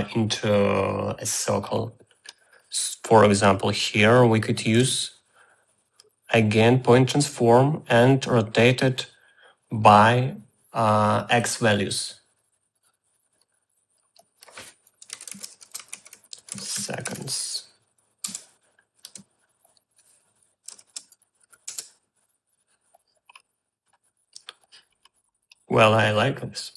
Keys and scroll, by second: 4.7 r, 5.3 a, 14.9-19.1 typing, 18.3 Return, 21.2 2, 21.5 0, 21.7 Return.